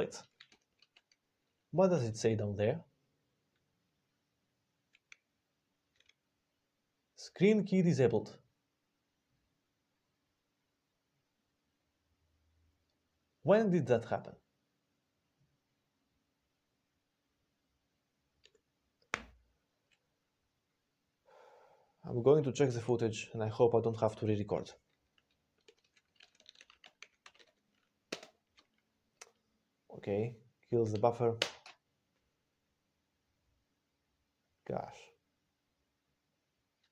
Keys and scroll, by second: 31.3 Return.